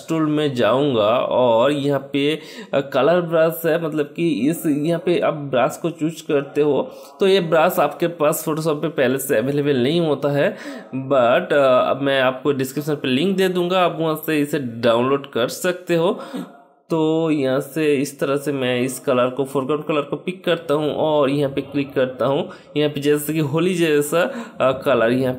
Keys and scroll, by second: 8.5-13.6 typing.